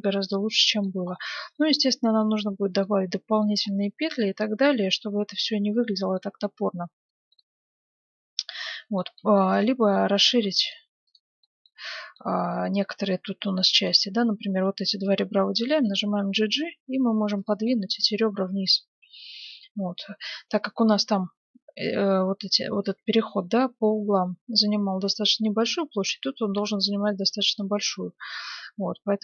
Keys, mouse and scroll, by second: 1.0-6.0 middle drag, 6.4 middle click, 6.8 Tab, 9.5-12.6 right drag, 10.2 ctrl+Tab, 10.2 middle click, 11.4-13.7 middle drag, 13.7-15.6 right drag, 15.6 g, 17.6-21.2 middle drag, 25.7-27.4 middle drag, 27.5-29.2 drag.